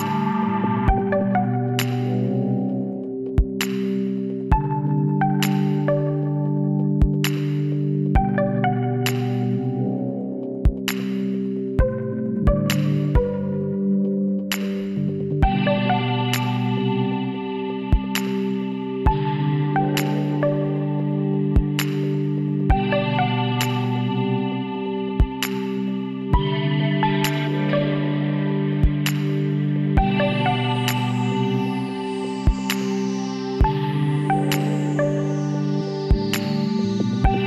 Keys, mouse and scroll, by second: 1.8 Tab, 3.6 click, 4.2-5.9 middle drag, 5.9 KP_1, 6.7 z, 7.3 middle click, 9.5 Tab, 10.2 Tab, 11.4 z, 13.3 e, 16.7-18.5 middle drag, 18.9-20.7 drag, 20.7-21.7 middle drag, 21.7 s, 23.8 middle click, 25.3 e, 29.5 click, 30.2-31.3 middle drag, 31.3 click, 31.7 middle click, 32.1-36.9 right drag, 36.9 middle click, 37.1-37.4 drag.